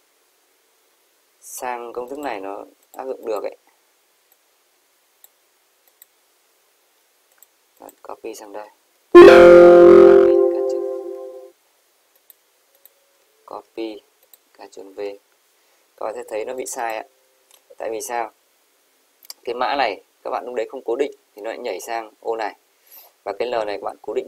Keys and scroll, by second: 9.1 ctrl+v, 10.3 ctrl+c, 11.1 Escape, 13.5 ctrl+c, 15.0 ctrl+v.